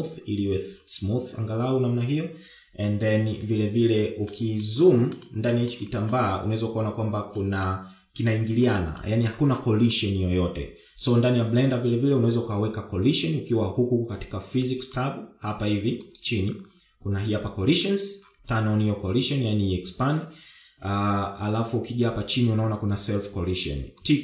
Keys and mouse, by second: 5.0-5.3 middle drag, 6.2 shift+middle drag, 6.8-8.0 middle drag, 8.3-9.0 middle drag, 9.4 middle drag, 10.2-10.6 middle drag, 16.7 click.